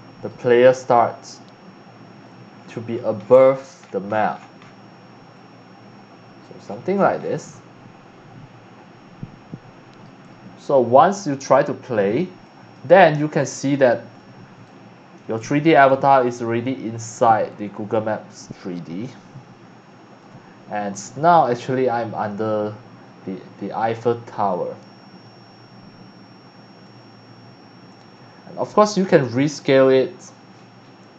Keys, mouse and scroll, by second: 1.2 click, 2.5-4.7 scroll down 8, 5.3-6.4 drag, 6.6-7.3 scroll down 3, 7.6-10.0 right drag, 11.4 click, 12.4 click.